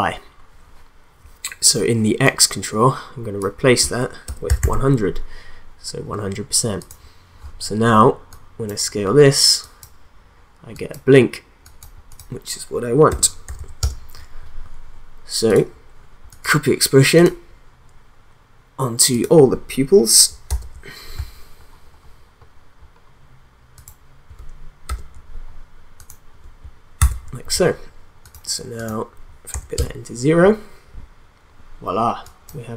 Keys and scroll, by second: 4.1-5.0 typing, 13.2 1, 13.5 0, 13.8 Return, 20.5 ctrl+v, 24.8 ctrl+v, 27.0 ctrl+v, 29.5 0, 29.7 Return.